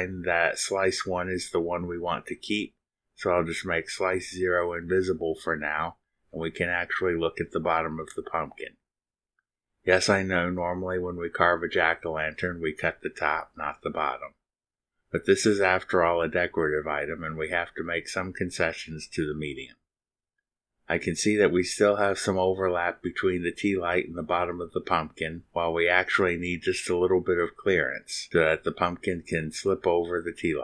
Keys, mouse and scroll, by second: 1.5 click, 2.1 space, 4.7-7.5 middle drag, 8.4-8.8 scroll up 2, 9.2 scroll up 2, 9.7 scroll up 2, 9.8 click, 11.5 click, 25.9 click.